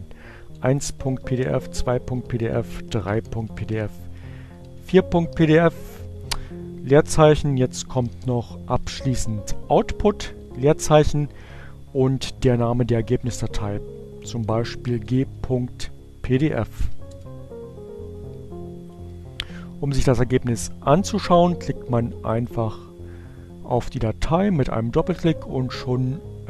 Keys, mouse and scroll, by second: 0.6-4.5 typing, 6.2 space, 7.4-9.4 typing, 13.6-14.7 typing, 16.2-17.0 typing, 19.6 click, 21.5-23.3 drag.